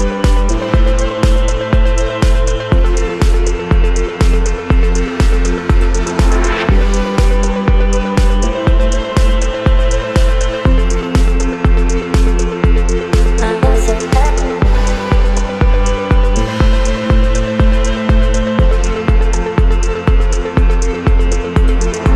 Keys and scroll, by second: 0.7 space, 18.6 space.